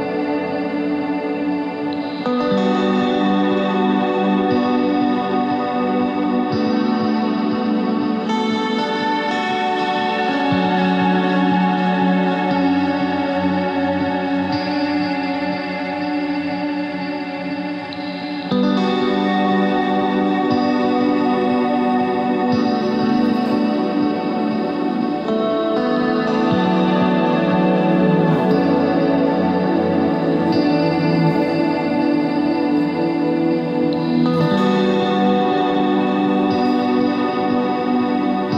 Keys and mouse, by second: 0.9 z, 1.1-3.7 drag, 1.5 z, 2.1 z, 3.1 Tab, 11.5 middle click, 15.9 Tab, 17.0 KP_3, 17.7 z, 18.0 c, 19.0 c, 22.5 z, 26.9 ctrl+b, 28.5 KP_3, 28.9 z, 29.1 c, 31.5 z, 37.0-38.5 drag.